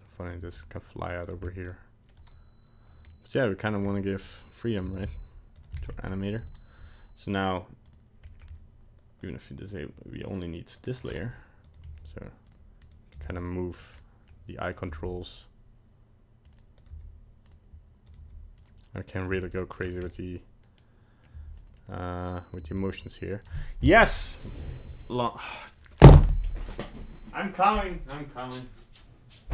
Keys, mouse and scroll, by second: 0.4 g, 1.5 middle click, 3.1 middle click, 3.2 middle click, 3.4 middle click, 3.8-4.2 scroll up 2, 4.2 right click, 5.0 alt+g, 5.5 right click, 5.8 alt+g, 5.9 middle click, 6.4 right click, 7.9 click, 8.3 middle click, 9.2 click, 9.7 click, 10.8 click, 11.6 right click, 11.8 g, 12.8 right click, 13.2 right click, 13.2 g, 14.0 middle click, 14.7 right click, 14.9 g, 16.8 right click, 17.1 g, 18.1 right click, 18.2 g, 19.1 right click, 19.3 g, 19.7-20.0 scroll down 4, 20.0 middle click, 21.3 g, 21.8 middle click, 22.6 g.